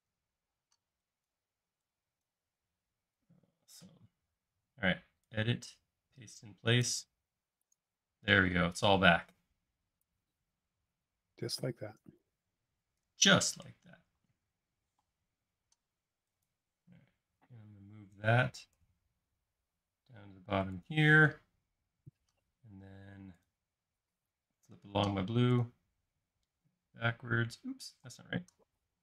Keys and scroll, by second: 0.0-0.6 typing, 14.9 m, 17.5 Up, 26.4 space, 28.0 typing.